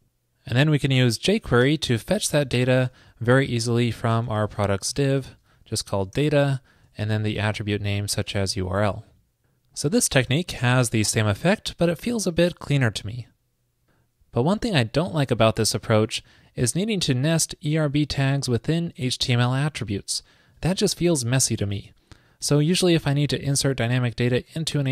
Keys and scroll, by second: 1.4 alt+shift+Left, 5.2 super+Right, 8.6 super+s, 10.4 super+r, 22.4 super+Right.